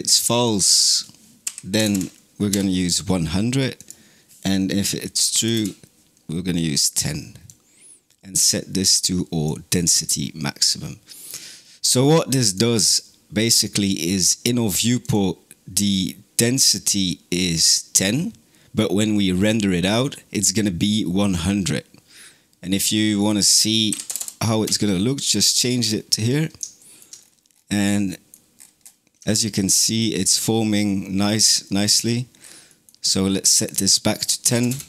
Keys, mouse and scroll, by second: 1.7 KP_0, 3.6-7.4 drag, 10.9 middle click, 11.7 click, 12.8 click, 14.9 click, 23.0 click, 24.0 KP_0, 25.7 scroll up 3, 26.2 middle click, 27.0-27.7 scroll up 7, 27.7-28.4 middle drag, 28.4-29.0 scroll down 10, 29.0-30.0 middle drag, 30.0-30.7 scroll up 9, 30.7-31.9 middle drag, 31.9-32.5 scroll down 6, 32.5 middle click, 33.5-34.8 drag.